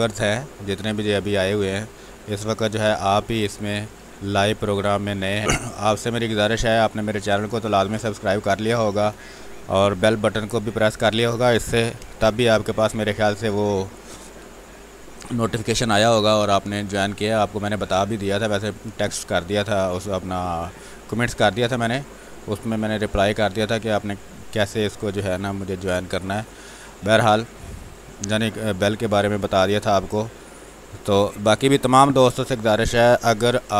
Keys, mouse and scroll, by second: 5.4 space, 7.4-13.4 drag, 13.4 space, 15.4-17.4 drag, 17.4 space, 19.4-26.1 drag, 26.1 space, 26.3 click, 26.6 space, 29.4-31.4 drag, 33.4 b.